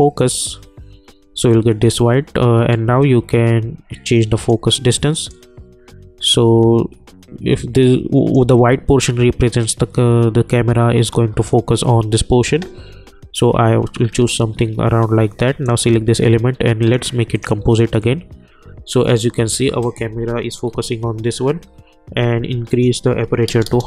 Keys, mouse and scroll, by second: 0.2 click, 1.0 scroll up 1, 1.2 scroll down 1, 1.7 scroll up 1, 2.7-9.6 drag, 9.9-11.5 drag, 14.0 scroll down 1, 14.1 scroll up 1, 14.7-15.6 scroll down 1, 15.6 click, 19.8 click, 21.7-22.7 scroll up 1, 22.7 click.